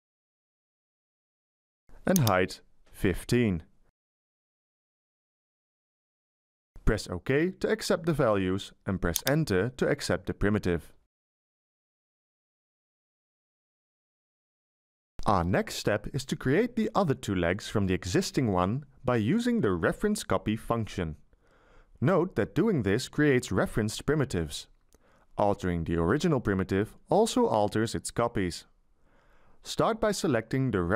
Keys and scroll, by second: 2.7 BackSpace, 4.3 1, 4.7 5, 10.1 Return.